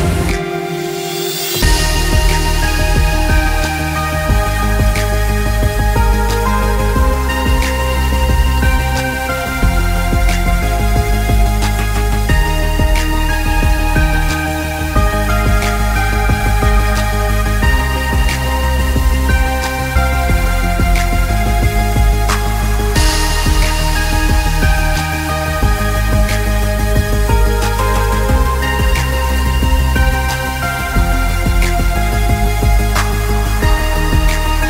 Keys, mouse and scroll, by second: 2.0 alt+scroll up 2, 2.2 z, 2.4 click, 3.9 space, 4.1 click, 4.6 space, 4.7 alt+scroll down 1, 5.2 click, 5.7 z, 5.8 scroll up 1, 5.9 click, 6.9 ctrl+z, 7.1 click, 7.6 space, 7.9 click, 8.4 click, 9.1 click, 9.6 ctrl+z, 9.8 click, 10.5 space, 10.8 click, 11.4 space, 11.6 click, 12.8 space, 13.1 click, 13.3 space, 13.7 click, 14.4 scroll down 1, 14.5 space, 15.3 click, 16.7 alt+scroll up 2, 16.9 click, 17.6 click, 17.8 right click, 18.0 alt+scroll up 1, 18.2 click, 18.6 scroll up 1, 18.9 click, 19.1-20.4 typing, 19.2 click, 20.0 scroll down 1, 20.2 scroll up 1, 20.6 click, 21.0-21.4 scroll down 2, 21.2 click, 21.5 click, 22.0 ctrl+g, 22.3 click, 22.8-25.1 typing, 23.0 alt+scroll up 1, 23.4 alt+scroll down 1, 24.1 scroll up 1, 25.0 click, 25.6 click, 26.2 click, 26.7 click, 27.2 z, 27.4 click, 34.3 click, 34.5 alt+scroll up 2.